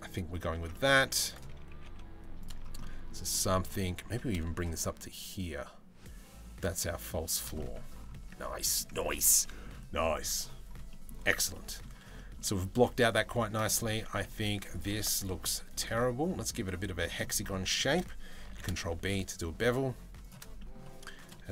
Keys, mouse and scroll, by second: 0.2 Tab, 0.3 middle click, 0.7 3, 1.3 g, 2.4 middle click, 2.9 middle click, 3.6 g, 7.2 middle click, 7.8 Tab, 8.0-8.4 middle drag, 9.0 middle drag, 10.5 middle drag, 11.2 middle click, 12.1-12.5 middle drag, 13.4 click, 13.5 Tab, 14.0 Tab, 14.8 alt+shift+right click, 15.6 middle click, 16.8 middle click, 17.4 shift+middle click, 18.1 ctrl+b, 20.2 middle click, 21.4 middle click.